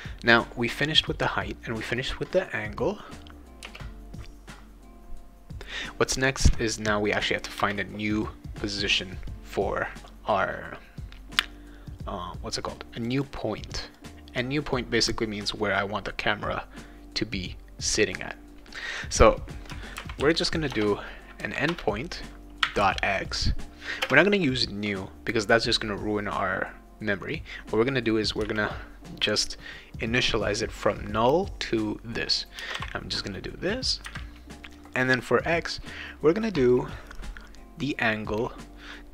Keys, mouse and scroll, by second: 0.3 click, 3.6 Return, 7.6 Return, 13.0 click, 13.2 click, 13.9 click, 19.7-20.9 typing, 21.7 Return, 22.6 ., 24.0 space, 28.4 =, 32.6 space, 32.7 ;.